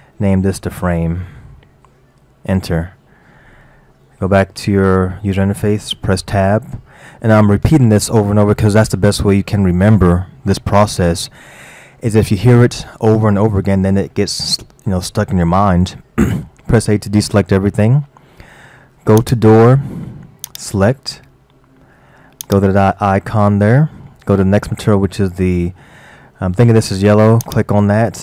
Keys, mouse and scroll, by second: 6.2 Tab, 17.5 a, 19.2 click, 20.5 click, 22.5-25.5 drag.